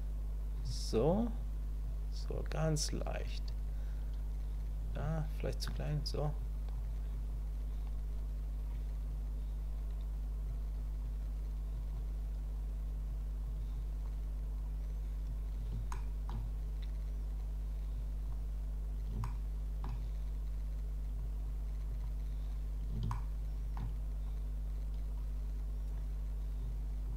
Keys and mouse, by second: 1.4 click, 2.3 click, 3.2 click, 5.0 shift+click, 6.4 click, 7.1 click, 8.7 click, 10.5 click, 11.7 click, 13.0 click, 13.7 click, 15.9 shift+middle click, 18.0 click, 19.2 shift+middle click, 21.2 click, 21.9 click, 23.1 shift+click, 25.2 click, 26.6 click.